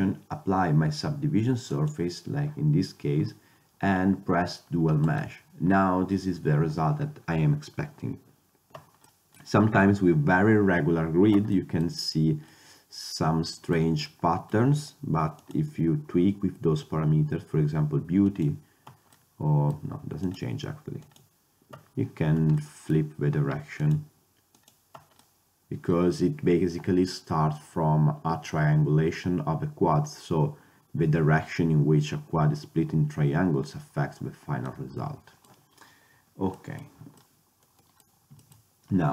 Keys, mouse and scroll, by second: 1.8 click, 3.7-5.2 middle drag, 6.9 drag, 9.2-11.4 middle drag, 11.7 middle click, 15.5-17.2 middle drag, 17.4-19.2 middle drag, 20.3-21.2 drag, 23.9-24.4 middle drag, 24.4 click, 25.3-27.2 middle drag, 34.9 middle drag, 37.4 middle drag, 37.8-39.1 middle drag.